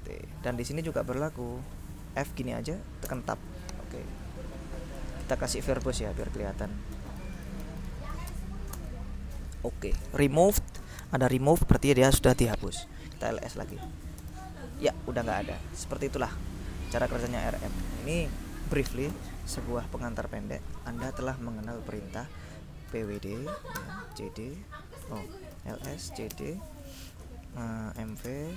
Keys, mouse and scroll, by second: 0.0-0.7 typing, 3.2 Tab, 5.9 ctrl+Left, 7.0 ctrl+-, 7.3 ctrl+v, 7.4 ctrl+e, 7.6 ctrl+r, 7.8 ctrl+b, 7.9 ctrl+o, 8.0 ctrl+s, 8.1 ctrl+e, 8.4 ctrl+space, 8.8 ctrl+Return, 11.4 click, 12.4-13.5 drag, 13.6-14.5 typing, 15.8 click, 19.1 ctrl+l, 22.7-28.5 typing.